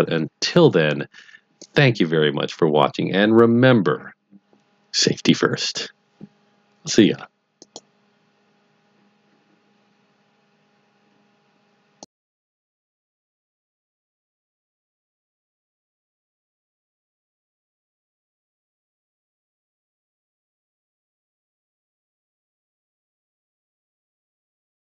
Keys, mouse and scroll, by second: 7.6 click.